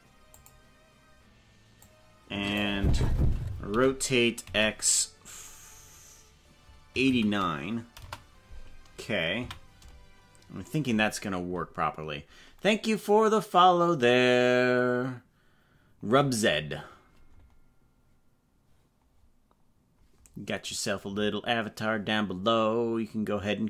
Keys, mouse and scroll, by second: 0.3 click, 1.9 click, 3.7 r, 9.5 a.